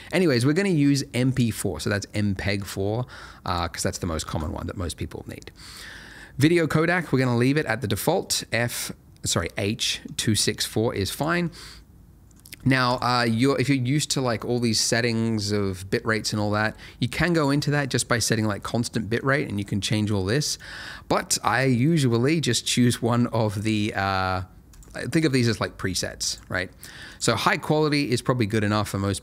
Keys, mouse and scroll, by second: 3.4 click, 11.4 middle click, 12.8 click, 17.7 click, 18.7 middle click, 20.5 click.